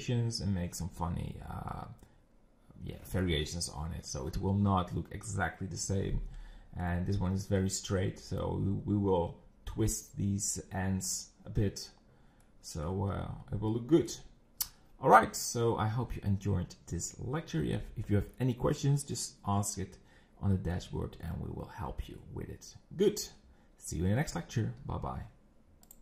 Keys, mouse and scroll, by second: 6.5-6.9 scroll down 2, 6.9-8.6 middle drag, 8.6 scroll up 4, 12.4 middle click, 13.1-13.7 scroll down 5, 13.7-25.9 middle drag.